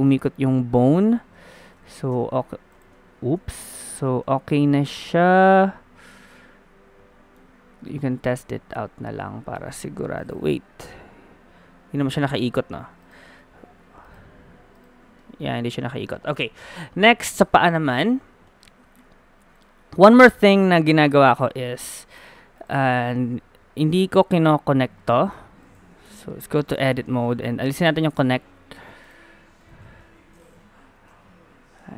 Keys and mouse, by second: 0.9 a, 1.0 a, 1.7 alt+g, 1.9 alt+r, 1.9 alt+s, 3.1 ctrl+z, 4.0 a, 7.9-9.7 drag, 9.7 middle click, 9.9 KP_1, 11.9 g, 13.4 ctrl+z, 14.0-15.2 drag, 15.2-18.0 middle drag, 15.8 a, 17.6 KP_3, 22.4 middle click, 22.6-23.8 drag, 26.1 Tab, 27.9-28.9 middle drag, 30.1 KP_3, 30.8-31.9 drag, 31.1 r.